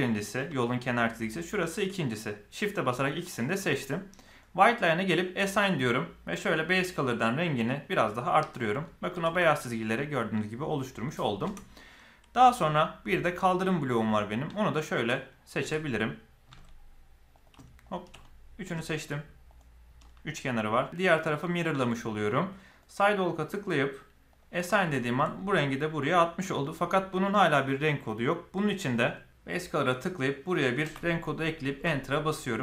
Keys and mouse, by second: 1.2 shift+click, 4.2 click, 5.2 click, 6.6 click, 8.5 click, 8.8 middle click, 9.2 Tab, 11.4 Tab, 11.7-12.5 middle drag, 15.5 z, 16.4 z, 18.2-18.5 middle drag, 19.4 shift+click, 19.9-20.2 shift+middle drag, 20.8 shift+middle click, 22.6 click, 24.9 shift+middle click, 25.3 middle click.